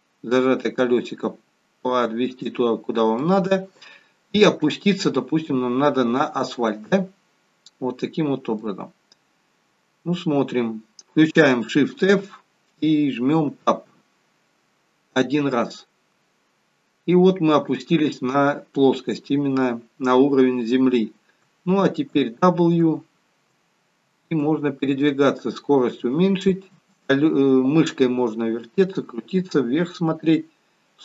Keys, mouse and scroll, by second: 2.8 scroll up 2, 3.2 middle click, 9.5 scroll down 1, 10.3 scroll up 1, 12.0 shift+f.